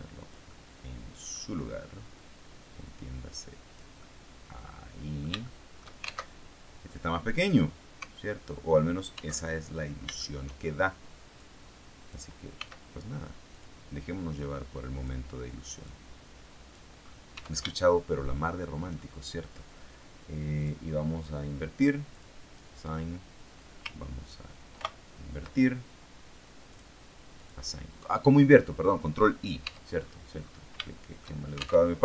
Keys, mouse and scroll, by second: 0.3-1.4 middle drag, 2.1-3.9 drag, 3.9-5.9 middle drag, 6.2 alt+shift+Tab, 9.3 alt+Tab, 10.1 shift+middle click, 11.3 click, 12.5 s, 13.4 click, 14.3 click, 15.7-16.8 drag, 16.8-17.8 scroll up 2, 17.3 Tab, 17.8 shift+click, 20.5 click, 22.0 click, 24.7 ctrl+i, 26.6 click, 27.3 click, 29.6 Tab, 29.9-30.6 scroll down 2, 30.7 shift+middle click, 31.8 alt+shift+Tab.